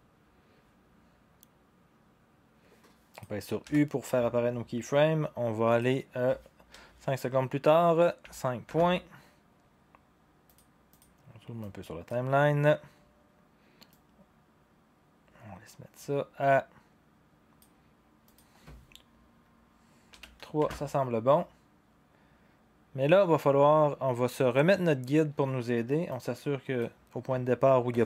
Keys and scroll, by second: 3.6 u, 6.7 5, 8.2 KP_Decimal, 8.6 Return, 20.1 3, 20.6 Return.